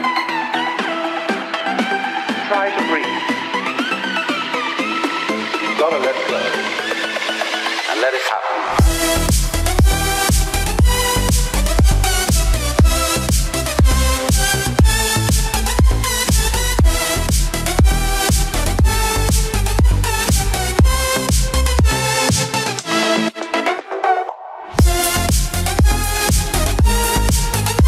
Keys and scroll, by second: 23.4 ctrl+z.